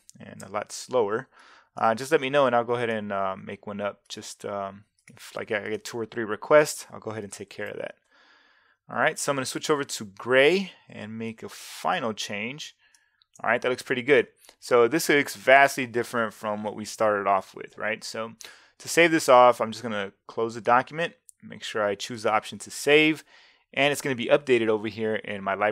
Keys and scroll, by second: 0.4 shift+c, 0.7 v, 7.5 super+8.